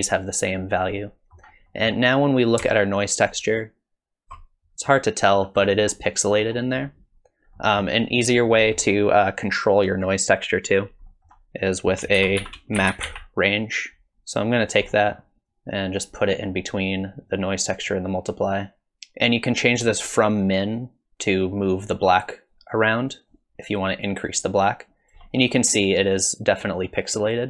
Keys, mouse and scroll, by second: 0.9 middle click, 1.7 middle click, 3.4 ctrl+shift+click, 4.8-5.3 scroll up 3, 5.3 scroll down 3, 5.6-6.3 scroll up 3, 6.3-7.4 scroll down 6, 7.6 middle click, 8.2-8.5 scroll down 1, 8.8 middle click, 8.8-10.0 scroll down 1, 10.3 click, 11.1 middle click, 11.7 click, 12.2 shift+a, 14.9 middle click, 15.5 click, 18.5 click, 18.9 ctrl+shift+click, 20.0 shift+click, 25.5-27.4 scroll up 2, 27.4 scroll down 1.